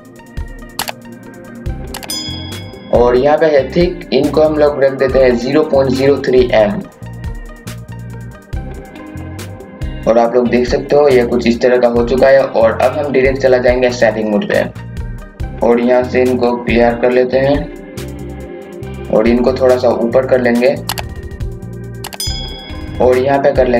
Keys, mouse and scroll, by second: 0.4 scroll up 1, 0.6 scroll down 1, 1.2-2.7 drag, 7.1 scroll down 1, 7.2 scroll up 1, 7.5 KP_6, 7.9 KP_2, 8.2 KP_8, 8.6 scroll up 1, 8.9 click, 9.8 scroll down 1, 10.1 scroll up 1, 10.6 scroll down 1, 11.3 scroll up 1, 11.8-12.1 scroll down 1, 12.3 scroll up 1, 13.1 click, 15.4-21.8 drag, 21.8 click.